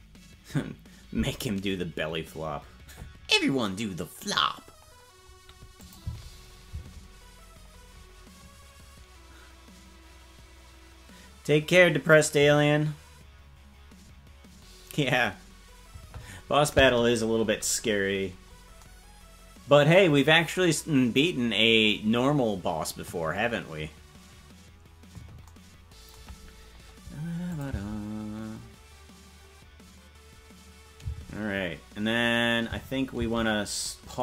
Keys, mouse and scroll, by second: 0.3 ctrl+s, 5.8 click, 6.0 space, 9.2 space, 18.3-18.7 scroll up 3, 27.5-28.8 drag, 27.6 space, 31.3 space, 33.8 space.